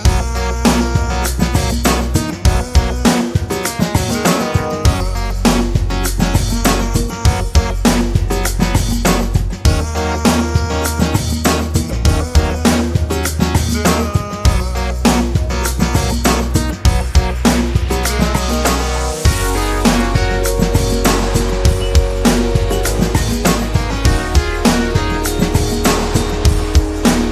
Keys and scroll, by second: 1.6-3.2 typing, 3.4 Return.